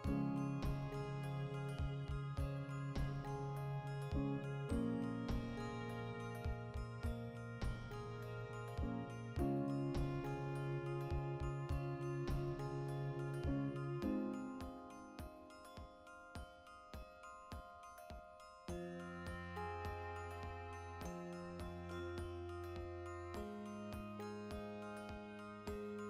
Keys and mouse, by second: 8.9 2, 9.2 alt+right click, 9.9 middle click, 10.4 alt+shift+right click, 10.6 ctrl+middle click, 11.2 alt+shift+right click, 11.4 middle click, 12.0 v, 12.2 right click, 12.4 middle click, 12.8 right click, 13.0 l, 13.4-14.6 shift+middle drag, 14.6 2, 14.7-16.9 right drag, 16.9 ctrl+f, 17.5-20.7 middle drag, 20.7 right click, 21.2 g, 21.8 click, 22.0 alt+right click, 22.8 g, 23.4 click, 23.6-25.0 shift+middle drag, 24.8 Tab, 25.0 right click, 25.5 h, 25.8 right click, 25.9-26.0 middle drag.